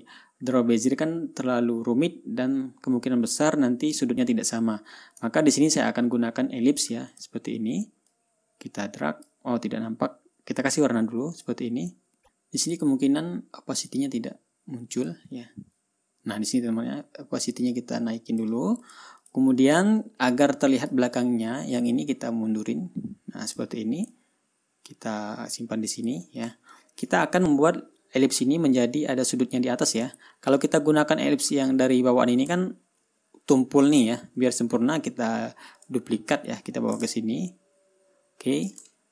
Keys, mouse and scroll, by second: 5.7-6.0 ctrl+scroll down 2, 6.2 ctrl+scroll up 2, 7.6 click, 8.6-9.9 drag, 11.8 click, 13.1 click, 14.4-15.7 drag, 16.8-19.0 drag, 19.3 click, 19.7 click, 20.5-21.5 drag, 22.6-24.2 drag, 24.6-26.7 drag, 27.1-27.4 ctrl+scroll up 2, 29.2-29.5 scroll down 3, 30.7 ctrl+scroll down 2, 33.1 ctrl+scroll up 2, 34.5 ctrl+scroll down 2, 35.3 right click, 36.3 click, 37.1-39.1 drag.